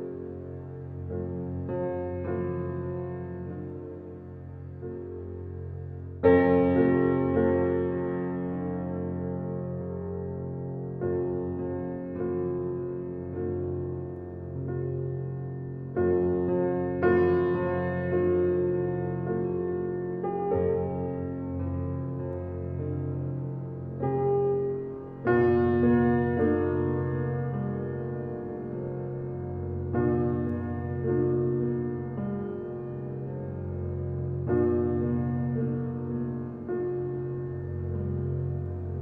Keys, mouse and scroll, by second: 2.0-2.8 drag, 3.8-6.3 drag, 7.5 click, 11.0 drag, 12.0-13.9 drag, 18.4 Tab, 19.5 click, 23.3 click, 24.8 drag, 25.5 click, 27.6 Tab, 29.0-29.6 scroll up 1, 29.6 shift+middle click, 30.1-30.6 scroll up 1, 30.6 shift+middle click, 31.3-31.8 scroll down 1, 32.8 click, 35.5 ctrl+click, 37.2 scroll down 1, 38.3-39.0 drag.